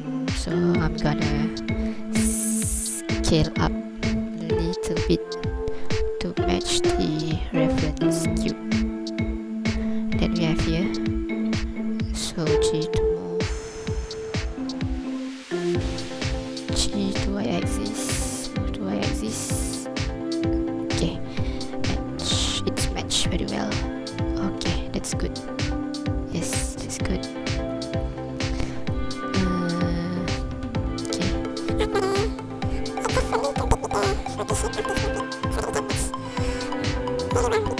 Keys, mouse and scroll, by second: 0.5 right click, 1.8 scroll up 2, 2.5 scroll down 2, 2.9 ctrl+click, 3.2 scroll up 1, 6.1 s, 9.7 click, 11.6 g, 16.7 g, 17.4 y, 20.9 click, 22.6 ctrl+click, 23.1-23.8 scroll up 5, 24.1-24.6 scroll down 4, 24.8 ctrl+click, 25.3 scroll up 3, 25.9 scroll up 2, 26.2-26.5 scroll down 4, 26.8 ctrl+click, 27.2 scroll up 2, 27.7 ctrl+click, 28.5 scroll down 1, 29.3 scroll up 1, 32.9 click, 32.9 n, 33.8 scroll down 2, 34.8 click.